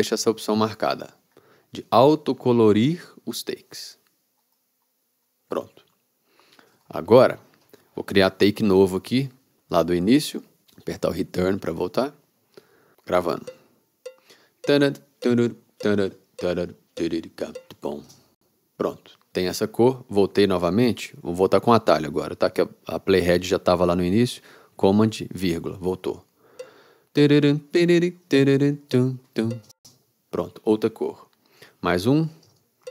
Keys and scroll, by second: 11.7 Return, 13.5 r, 18.2 space, 26.4 super+,, 26.7 r, 29.8 space, 32.4 super+,.